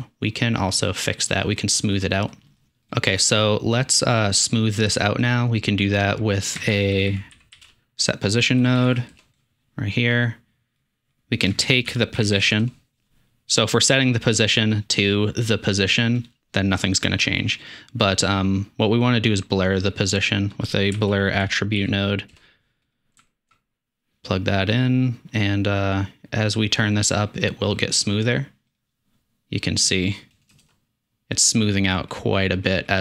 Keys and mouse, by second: 0.8 middle click, 2.9-3.4 drag, 6.7 shift+a, 7.2 s, 11.2 click, 11.7 shift+a, 14.4-17.7 drag, 23.0 alt+click, 28.8 click.